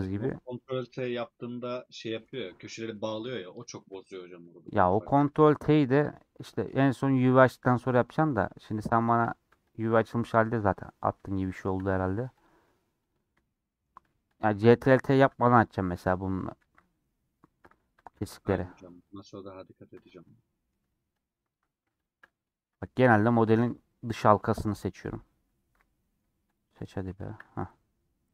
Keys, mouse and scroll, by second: 0.7 scroll up 1, 0.8 scroll down 1, 1.4-2.7 middle drag, 2.7-3.1 scroll down 1, 3.2 middle click, 3.7 click, 3.9-5.6 shift+middle drag, 6.1 click, 6.6-8.4 middle drag, 8.4 click, 8.6-9.8 middle drag, 9.8 ctrl+click, 9.9 middle click, 10.3 scroll up 1, 10.9 scroll up 1, 11.2-12.5 shift+middle drag, 12.5 ctrl+click, 13.1 ctrl+click, 13.4 scroll down 1, 13.4-14.4 middle drag, 14.4 ctrl+click, 14.6-15.7 middle drag, 15.7 ctrl+click, 16.5 ctrl+z, 16.8 middle click, 17.0 scroll up 1, 17.4 shift+middle click, 17.6-17.9 scroll up 2, 18.3 ctrl+click, 19.2 ctrl+click, 20.0 scroll down 1, 20.2-21.3 middle drag, 21.3 ctrl+click, 22.8 middle click, 23.7 ctrl+click, 24.1 middle click, 25.0 ctrl+click, 25.9 middle click, 26.8 shift+click, 27.8 scroll down 2, 28.2 middle click.